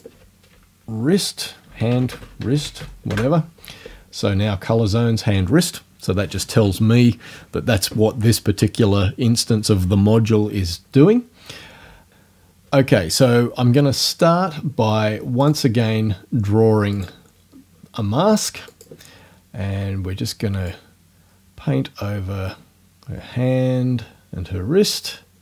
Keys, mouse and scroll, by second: 0.0 click, 1.4-3.3 typing, 15.4 click, 17.0 click, 18.7 click, 20.7-25.1 drag.